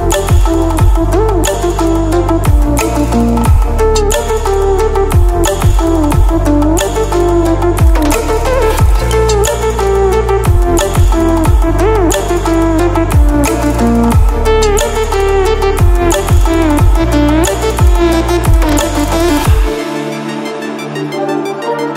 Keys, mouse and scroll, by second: 2.7 ctrl+alt+scroll up 1, 3.5-15.6 drag, 10.6-11.4 typing, 16.2 ctrl+alt+scroll down 1, 17.7-18.0 ctrl+alt+scroll down 1, 18.3 ctrl+alt+scroll up 1, 19.3-21.9 drag.